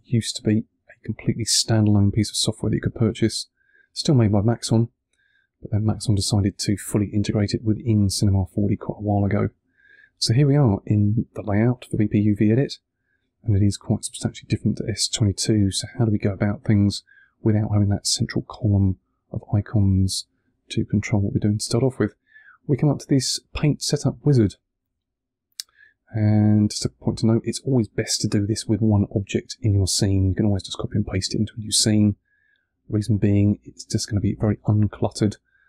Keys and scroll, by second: 3.4 1.